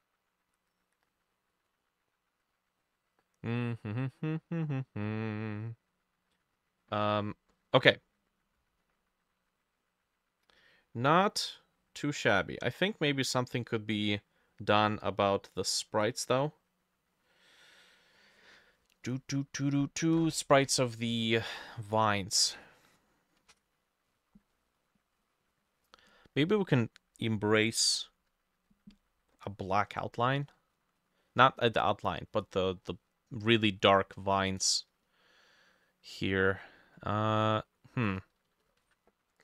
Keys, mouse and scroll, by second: 24.1-24.6 scroll up 5, 24.6 middle click, 25.2 scroll up 2, 25.9 middle click, 29.9-30.4 scroll down 1, 30.4 middle click, 31.2 middle click, 32.4 middle click, 32.9 middle click, 38.8 ctrl+shift+a.